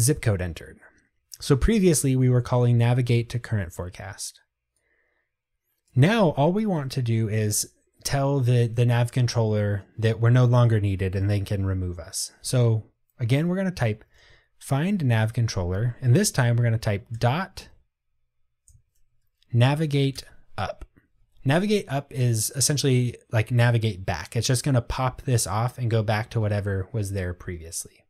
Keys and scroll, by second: 15.1 Tab, 20.3 Return.